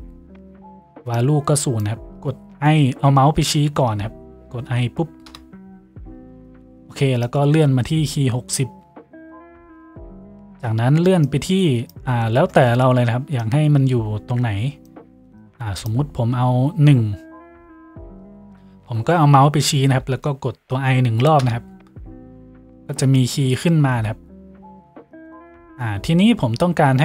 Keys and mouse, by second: 5.3 i.